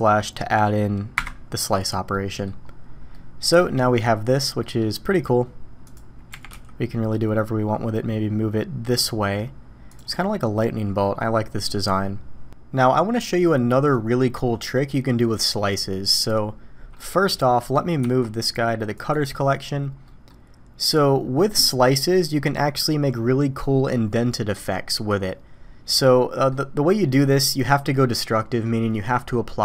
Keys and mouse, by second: 2.1-2.4 drag, 3.1-3.6 drag, 4.6 click, 6.3 g, 11.7 drag, 11.8-17.3 middle drag, 17.5 middle click, 18.0 m, 20.0 drag, 25.9-26.5 middle drag.